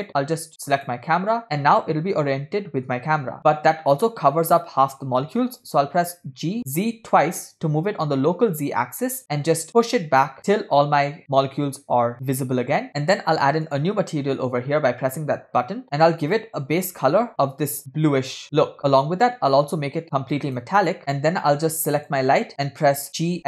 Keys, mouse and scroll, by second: 0.1-1.3 drag, 5.6 g, 13.9 drag, 15.8 middle click, 15.8 scroll up 7, 16.3 click, 19.8-21.0 drag, 23.3 g.